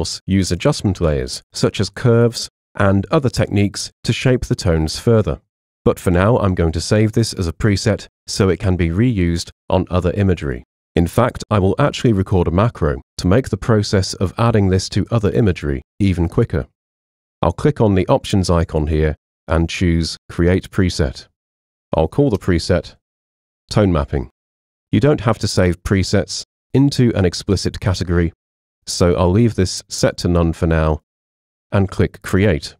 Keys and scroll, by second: 21.4-24.2 typing.